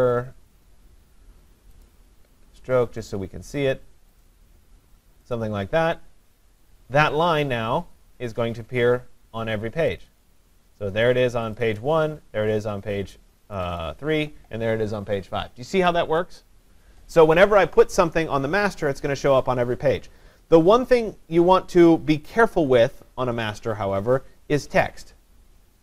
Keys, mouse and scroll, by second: 1.9 click, 2.9 click, 3.1 click, 3.7 click, 5.4 click, 8.1 click, 10.0 click, 10.3 click, 11.6 click, 11.8 click, 13.6 click, 13.8 click.